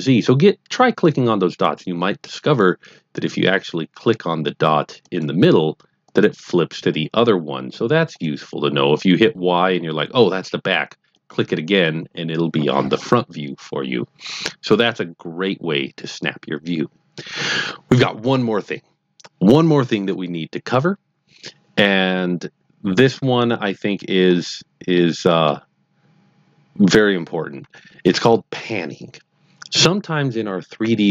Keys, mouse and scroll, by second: 1.6 click, 2.4 click, 5.0 click, 6.0 click, 8.1 click, 11.1 click, 23.9-24.2 scroll down 1, 24.2-24.9 scroll up 2, 24.9-25.5 middle drag, 24.9 scroll up 1, 25.7-27.1 scroll down 2, 27.1-28.0 scroll down 1.